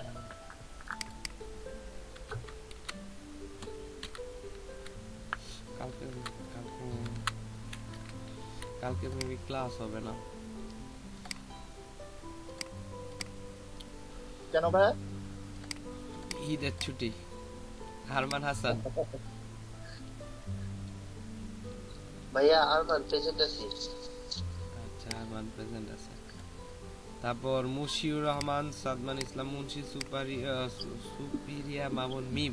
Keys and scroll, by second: 2.3 BackSpace, 2.7 shift+a, 4.6 a, 5.9 BackSpace, 8.3 a.